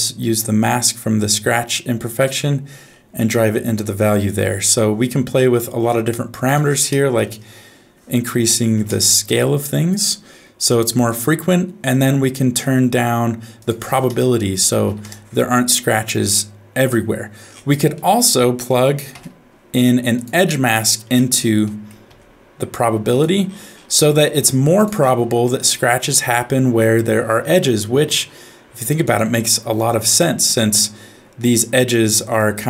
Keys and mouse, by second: 0.3 click, 0.4-2.3 drag, 5.5 middle click, 6.5-8.9 drag, 13.7-15.0 drag, 17.9 click, 18.7 click, 19.1 f, 21.8 middle click, 22.1 g, 24.1 middle click, 24.3 g, 25.5 middle click, 26.9-29.0 drag.